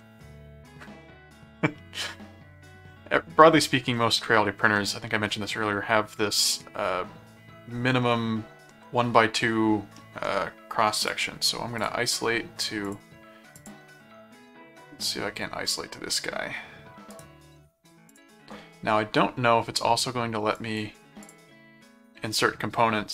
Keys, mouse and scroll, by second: 3.9 middle click, 4.8 middle click, 9.9 middle click, 11.0 click, 11.7 click, 12.8 click, 13.5 click, 17.1 right click, 18.1 click, 20.6 click, 21.2 click.